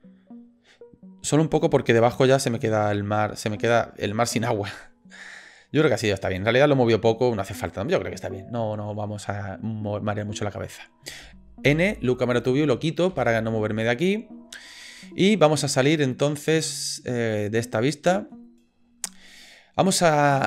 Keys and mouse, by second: 6.3-7.7 drag, 11.7 n, 12.3 click, 13.1 n, 17.3 click, 17.8 middle click.